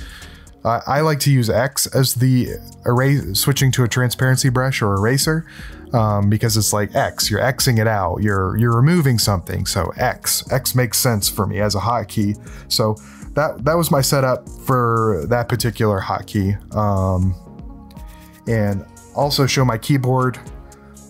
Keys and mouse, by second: 13.3 middle click, 13.6 middle click, 14.7 middle click, 18.1 click.